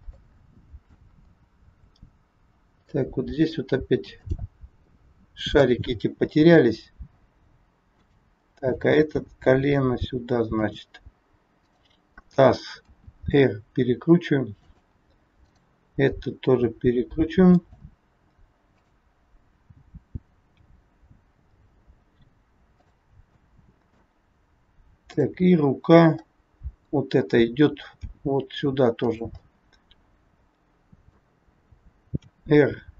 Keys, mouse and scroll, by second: 0.2 middle click, 1.2 scroll down 2, 2.8 middle click, 4.1 click, 4.8 middle click, 6.5 g, 8.6 click, 9.2 g, 11.6 click, 12.8 r, 15.3 click, 16.1 r, 18.7 click, 20.4 g, 23.3 middle click, 25.1 click, 25.7 scroll up 2, 26.2 scroll up 1, 26.3 middle click, 28.0 g, 29.4 middle click, 32.2 r.